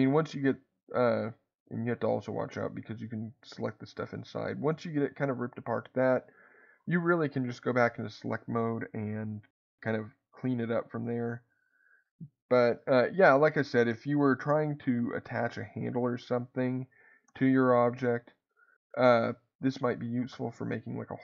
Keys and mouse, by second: 0.0-1.8 drag, 1.5 Escape, 1.5 right click, 2.6 click, 3.4-5.1 drag, 9.6 click, 12.8-13.8 shift+middle drag, 14.7 click, 17.3 g, 18.3 click, 19.1 click, 20.1 g, 20.9 click.